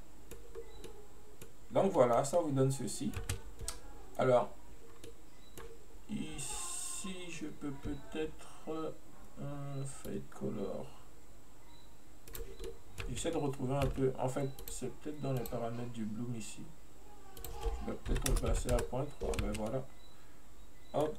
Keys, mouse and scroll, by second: 0.6 scroll up 1, 0.9-1.7 middle drag, 1.7-2.1 scroll up 1, 2.1-3.3 middle drag, 3.3 space, 5.0 scroll down 1, 5.1-8.1 middle drag, 10.1-12.4 drag, 12.7-13.1 middle drag, 13.1 space, 13.4 middle click, 14.0 space, 14.7-19.5 drag, 19.5 space, 19.7-21.1 middle drag.